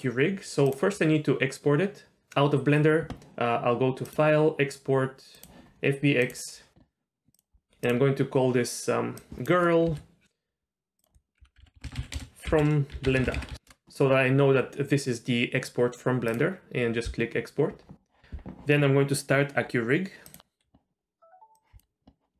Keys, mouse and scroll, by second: 0.7 click, 4.0-6.4 drag.